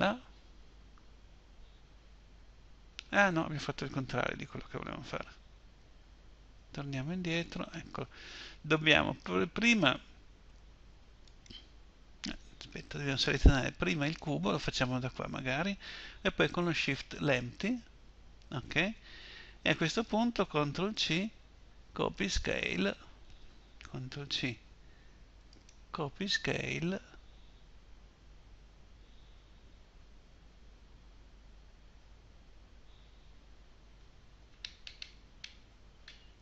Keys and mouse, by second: 5.2 ctrl+z, 5.8 ctrl+z, 6.4 ctrl+z, 10.6-13.5 right drag, 14.9-16.7 right drag, 23.5 ctrl+c, 34.4-35.4 middle drag.